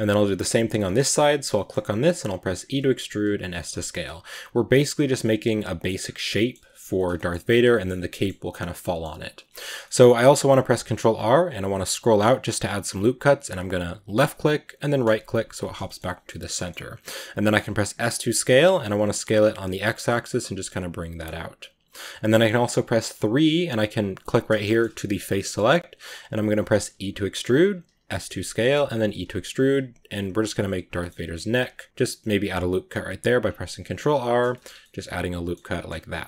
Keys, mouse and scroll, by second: 0.0-0.7 right drag, 0.7-2.4 shift+middle drag, 2.4 e, 3.3 s, 4.3 g, 4.8 right click, 5.1-5.8 middle drag, 5.8-6.2 scroll down 3, 6.2-7.5 middle drag, 7.5-7.9 scroll up 1, 7.9-11.8 middle drag, 11.8 ctrl+r, 15.7 shift+middle click, 15.9-16.3 scroll up 1, 16.3-17.9 middle drag, 17.9 s, 23.0 3, 24.1 right click, 24.5 shift+middle click, 24.7-25.3 scroll up 3, 24.9 middle click, 25.3-26.6 middle drag, 26.6 e, 27.7 s, 28.9 e, 29.5 s, 30.8 middle click, 31.1 ctrl+r, 33.3 scroll down 1, 33.5-34.5 middle drag, 34.5 Tab, 34.7-35.7 middle drag, 35.7 Tab.